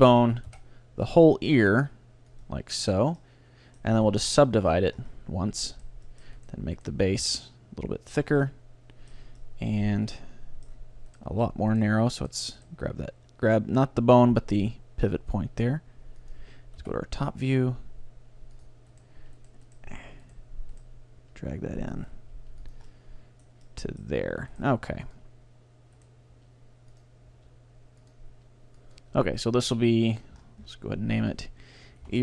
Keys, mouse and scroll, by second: 0.0-1.9 drag, 0.5 KP_7, 1.3 g, 2.6-3.6 drag, 2.9 right click, 3.3 middle click, 3.7 click, 3.7-7.9 middle drag, 3.7-4.7 right drag, 4.1 w, 5.8-8.5 right drag, 7.2 ctrl+alt+s, 8.7 middle click, 11.2-15.3 right drag, 11.3 g, 14.3 g, 16.4-18.3 drag, 16.8 KP_7, 17.8 g, 19.0-22.6 right drag, 19.2 g, 21.2 g, 22.4 g, 22.8-24.5 drag, 23.0-25.5 middle drag, 24.7-27.8 right drag, 24.8 g, 26.4 g, 27.0-30.0 drag, 27.4 r, 28.4 g, 30.4-31.3 scroll down 1, 31.3-32.2 drag, 31.3-32.2 middle drag.